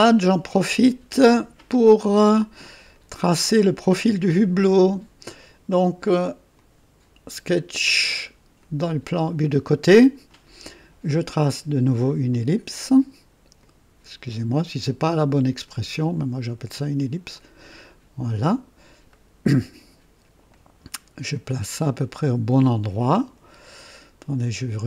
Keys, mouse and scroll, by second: 1.1 click, 2.8 click, 6.5 click, 8.5 click, 9.8 click, 12.2 click, 13.5 click, 15.6 click, 17.0 click, 17.5 right click, 19.0 right click, 20.4-23.3 drag.